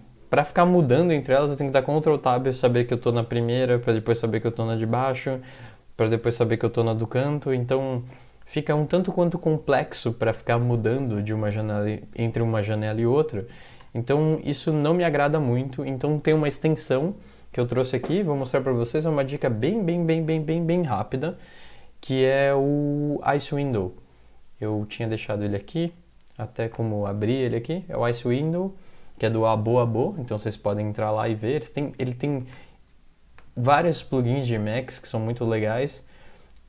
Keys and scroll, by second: 1.6 ctrl+Tab, 3.5 ctrl+Tab, 6.4 ctrl+Tab, 13.6 ctrl+x, 13.8 0, 14.2 ctrl+x, 14.7 0, 23.7 alt+Tab, 24.8 alt+Tab, 25.0 alt+Tab.